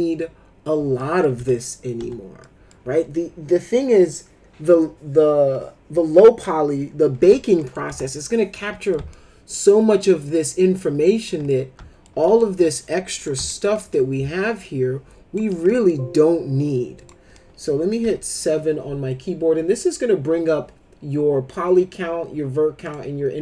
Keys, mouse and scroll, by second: 0.9 middle click, 1.3 F3, 2.0 F3, 2.4 middle click, 7.1 F3, 7.6 middle click, 7.8 F3, 8.5 middle click, 9.1-11.3 alt+middle drag, 11.4 alt+middle click, 12.2 middle click, 12.5 w, 13.1 click, 13.5 alt+middle click, 13.7 middle click, 14.6 shift+click, 15.7 middle click, 16.9 click, 17.3 middle click, 18.0 7, 22.8 click.